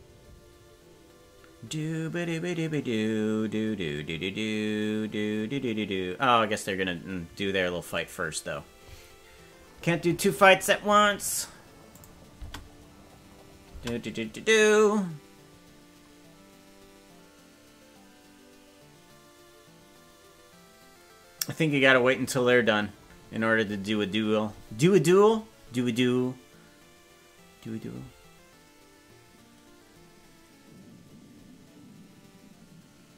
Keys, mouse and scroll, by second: 10.9-11.5 scroll down 6, 11.9 click, 12.5 space, 13.7 space.